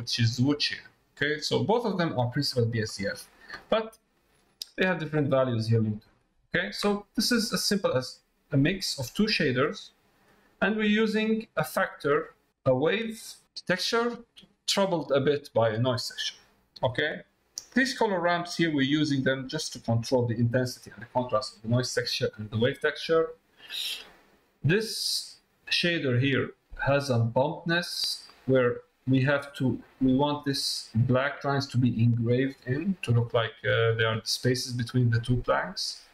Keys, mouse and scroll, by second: 1.3 click, 1.9 middle click, 2.6 middle click, 3.2 middle click, 3.8 middle click, 6.0 middle click, 6.5 middle click, 7.2 middle click, 7.9 click, 8.6 middle click, 9.9 middle click, 11.0 click, 11.7 middle click, 12.6 click, 13.4 click, 22.0 middle click, 22.8 middle click, 23.5 middle click, 24.6-25.9 drag, 26.0 middle click, 33.4 middle click, 34.7-35.7 middle drag.